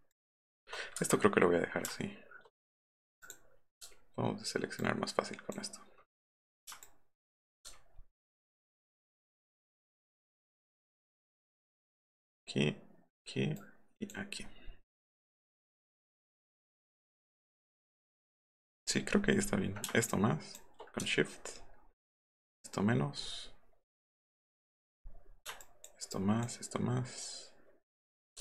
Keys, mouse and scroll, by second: 0.1 shift+click, 1.5 click, 3.2 click, 4.8 alt+click, 6.8 shift+click, 7.7 alt+scroll up 2, 9.3 alt+scroll up 1, 9.3 alt+scroll down 1, 10.1 alt+scroll up 1, 10.1 alt+scroll down 1, 10.4 alt+scroll up 1, 10.7 alt+middle click, 11.2 alt+click, 12.3 alt+click, 13.6 alt+click, 14.4 alt+scroll up 1, 14.7 alt+scroll down 1, 15.0 alt+scroll up 2, 15.5 alt+scroll down 1, 16.4 alt+scroll up 1, 18.8-19.6 scroll up 6, 20.1 shift+click, 21.1 alt+scroll down 2, 21.5-21.9 alt+scroll up 4, 22.2 alt+click, 22.9-23.9 alt+scroll down 7, 25.6 shift+click, 26.1 shift+click.